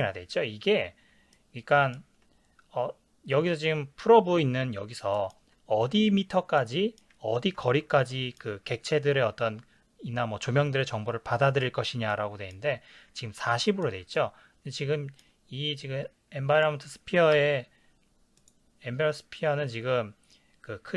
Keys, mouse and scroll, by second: 1.3-16.6 ctrl+middle drag, 16.6 click, 17.5 n.